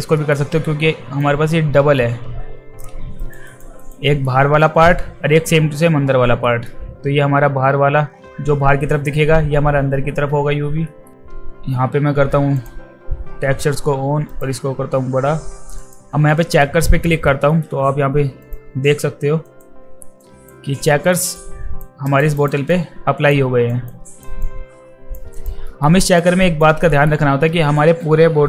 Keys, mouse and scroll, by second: 0.2 alt+middle click, 1.2-2.8 drag, 3.2 alt+right drag, 3.5 alt+right drag, 3.8 alt+right drag, 4.1 alt+middle drag, 6.4 alt+middle drag, 12.5 click, 14.3 click, 15.8 click, 16.6 alt+middle click, 17.5 alt+middle click, 18.4 click, 19.4 click, 20.2 alt+drag, 20.9 alt+middle drag, 21.4-21.8 alt+drag, 22.1 alt+right drag, 22.4 alt+right drag, 22.7-23.3 alt+drag, 23.7 alt+drag, 24.1 alt+drag, 24.4-25.2 alt+drag, 25.3 alt+click, 26.2 alt+right click, 26.9 alt+middle drag.